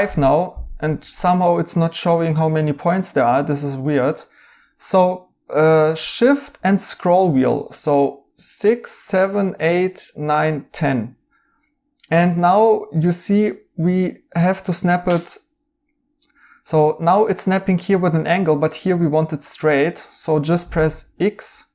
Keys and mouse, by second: 20.8 x.